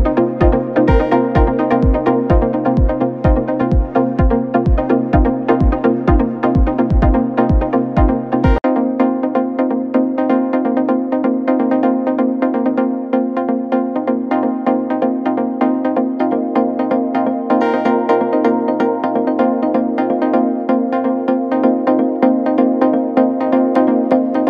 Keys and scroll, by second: 2.9 KP_2, 3.0 KP_0, 3.1 KP_0, 3.4 Return, 6.8 KP_2, 7.0 KP_5, 7.2 KP_0, 7.5 Return, 10.9 KP_3, 11.1 KP_2, 12.0 KP_0, 12.3 Return, 16.4 KP_3, 16.6 KP_0, 16.7 KP_0, 17.1 Return, 23.6 KP_0, 23.8 Return.